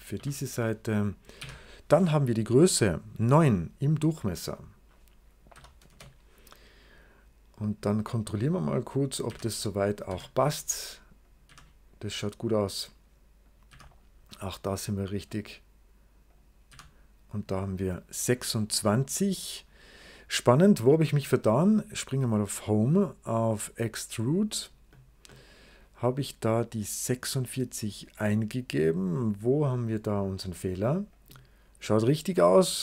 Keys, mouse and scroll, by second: 0.0 o, 1.0 click, 1.3 d, 4.0 click, 4.3 click, 4.4 click, 5.4 9, 5.7 Return, 7.4 click, 9.1 d, 10.0 Escape, 10.2 click, 11.1 click, 11.4 d, 12.5 click, 13.3 click, 13.6 d, 15.2 click, 16.2 click, 16.6 d, 22.3 click, 24.2 click, 25.2-26.4 middle drag, 25.3 right click, 31.0 click, 32.3 right click.